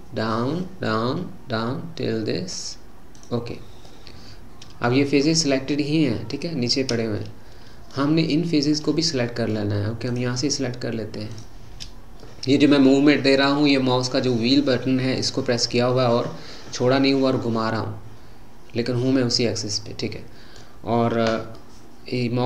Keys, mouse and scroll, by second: 3.9-8.3 middle drag, 8.8-10.1 middle drag, 10.1 shift+click, 11.4 shift+click, 12.2-15.3 middle drag, 21.5-22.4 middle drag.